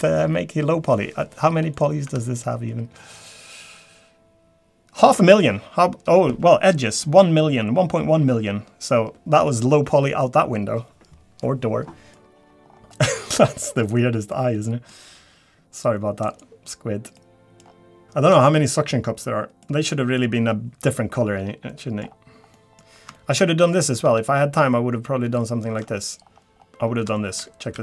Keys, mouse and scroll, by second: 0.4-1.1 scroll down 1, 1.7 click, 3.0 Tab, 12.1 middle click, 12.1 scroll down 5, 12.6-13.4 scroll up 5, 13.6 middle click, 14.5 middle click, 15.8-16.3 scroll down 1, 16.3 click, 17.2 middle click, 17.6-18.1 scroll down 6, 18.0 shift+middle click, 18.0 scroll up 8, 18.3-18.7 scroll down 3, 18.8 middle click, 19.9 middle click, 21.0 scroll down 2, 21.3 scroll up 2, 21.7 middle click, 22.0-22.5 scroll up 4, 22.5 middle click, 23.1 shift+middle click, 23.6 click, 25.0 Tab, 25.3 shift+middle click, 25.8 scroll up 4, 26.3 scroll down 3, 26.6 scroll up 2, 27.1 shift+middle click.